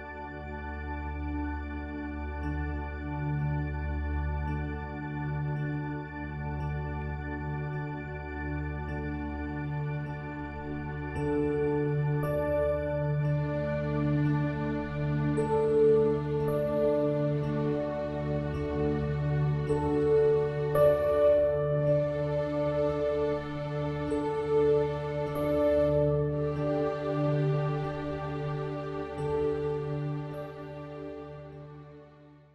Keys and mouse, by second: 0.5 click.